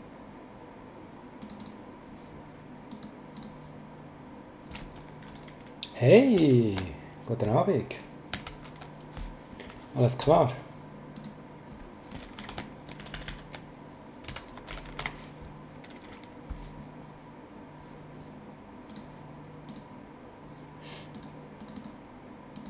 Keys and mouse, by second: 1.4 click, 2.9 click, 6.4 ctrl+shift+Right, 11.1 click, 12.4 Left, 13.0 shift+Right, 14.0-15.5 typing, 18.9 click, 21.1 click.